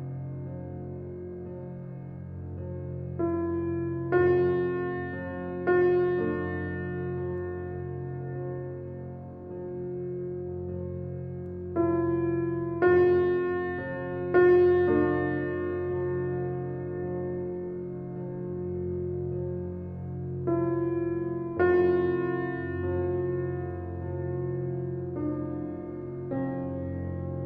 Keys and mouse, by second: 0.1 click, 2.2 click, 2.9 Tab, 3.1 right click, 4.2 click, 4.9 Tab, 6.9 click, 8.0 click, 9.3 ctrl+r, 13.1 s, 14.9 2, 15.3 click, 15.8 shift+click, 16.0 shift+click, 16.4 s, 19.8 Tab, 20.1 click, 20.9 click, 22.5 Tab, 23.8 s, 26.3 ctrl+r.